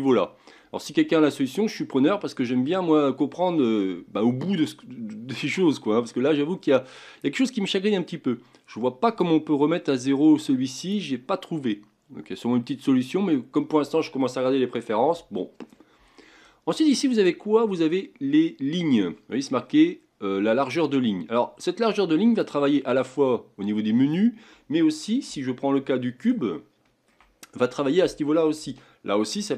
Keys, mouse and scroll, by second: 9.0-12.1 right drag, 25.4-27.3 middle drag, 27.3 scroll up 4, 28.7-29.5 shift+middle drag.